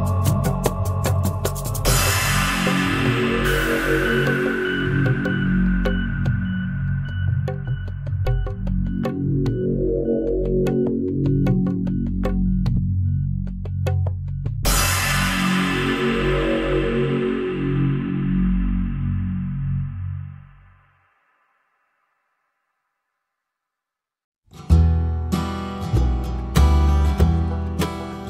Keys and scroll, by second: 11.2 Return, 18.2 Return, 20.0 Return, 21.2 Return.